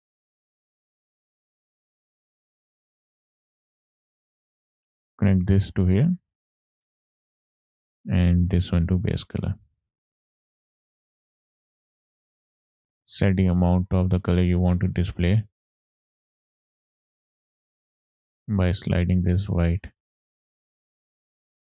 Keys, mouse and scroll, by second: 1.2 click, 1.7 middle click, 2.9-3.5 drag, 3.5 middle click, 4.1 click, 5.3-7.3 drag, 7.8-9.3 drag, 10.3 click, 11.6 scroll down 2, 11.7 middle click, 12.3-12.7 scroll up 3, 13.3-14.3 drag, 14.7-17.3 drag, 18.6-20.8 drag, 20.9 ctrl+z, 21.2-21.7 drag.